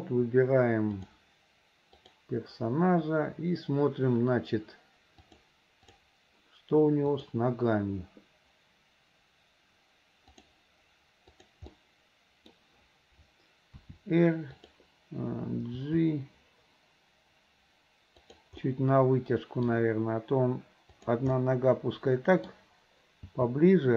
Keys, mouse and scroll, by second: 1.1 click, 2.1 click, 5.2 click, 7.1 click, 10.4 click, 11.8-12.6 middle drag, 13.8 r, 16.4 g, 18.7-19.8 middle drag, 20.9 click, 21.4-22.6 middle drag.